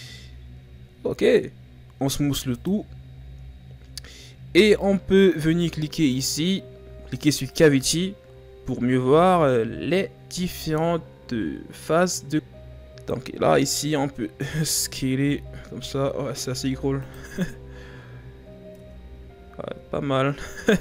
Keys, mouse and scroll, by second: 0.0 click, 2.0 w, 3.7-4.4 ctrl+scroll down 2, 4.4-6.0 scroll up 1, 6.0-9.1 drag, 9.9-11.4 scroll up 3, 11.4-11.7 scroll down 4, 12.3-12.9 scroll up 3, 12.9 s, 17.4-18.1 scroll down 5, 18.1-18.8 scroll up 2, 18.8 Tab, 19.5 scroll up 1, 19.6 scroll down 5, 20.5-20.8 scroll up 1.